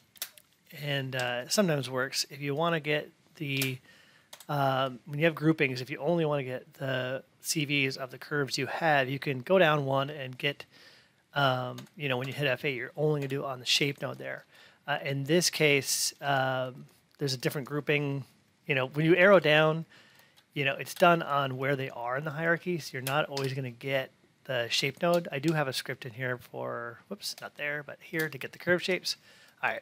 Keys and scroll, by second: 0.1 Down, 4.2 F8, 11.7 F8, 22.9 Down, 25.3 Up.